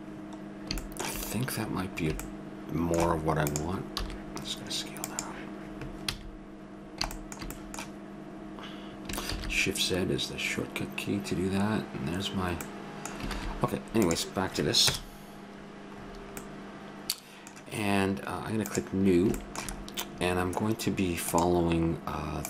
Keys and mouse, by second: 3.5-4.6 drag, 4.0 s, 6.1 a, 9.6 shift+z, 11.7 middle click, 13.4 shift+z, 14.0 right click, 14.8 KP_0, 17.0 middle click, 18.7 click.